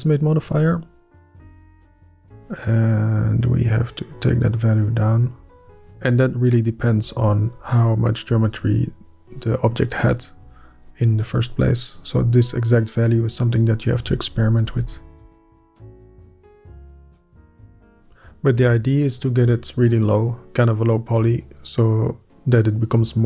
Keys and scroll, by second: 14.6 Up, 14.8 KP_Decimal, 15.2 KP_1, 15.4 Return, 19.4 Up.